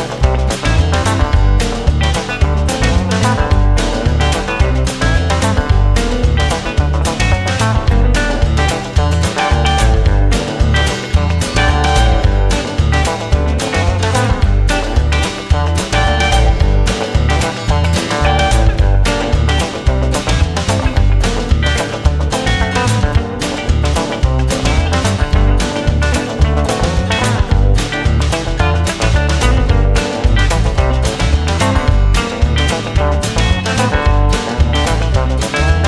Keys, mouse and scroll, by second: 4.4 space, 10.0 space, 10.4 space, 11.3 click, 11.4 click, 11.4 space, 11.6 space, 13.7 space, 16.5 space, 16.8 space, 17.2 space, 17.4 right click, 19.2 space, 19.8 right click, 20.6 right click, 25.5 right click, 27.6 right click, 28.9 right click, 30.3 right click, 35.3 space.